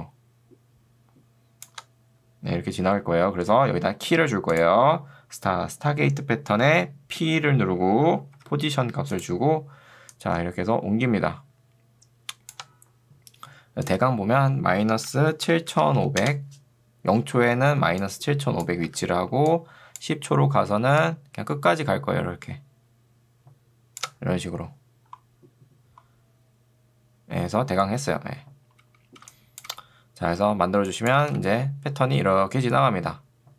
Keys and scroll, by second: 3.0 ctrl+z, 7.2 p, 8.4 p, 15.8 0, 16.2 Return, 18.0 2, 19.0 Escape, 29.2 space.